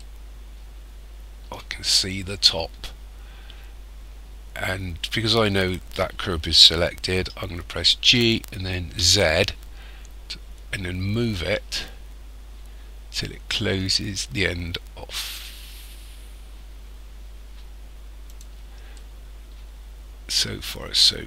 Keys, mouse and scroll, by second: 0.0 shift+middle click, 2.2 scroll up 3, 3.2-3.6 scroll up 3, 8.0 g, 19.0 middle click, 19.7-21.2 scroll down 18.